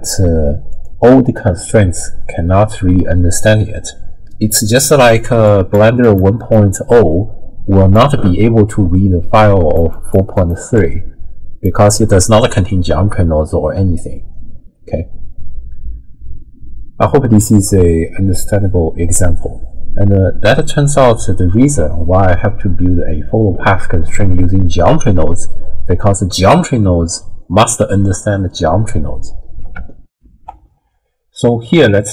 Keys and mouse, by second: 0.7 click, 5.1-13.0 typing, 5.5 click, 6.0 click, 6.5-7.9 drag, 9.4 click, 9.9 click, 10.3 click, 10.7 click, 30.1 ctrl+alt+shift+w, 30.5 ctrl+alt+shift+q.